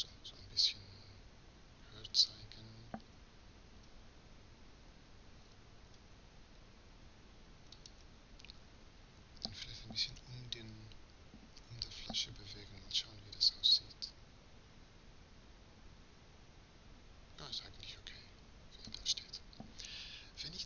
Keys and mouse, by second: 3.1 g.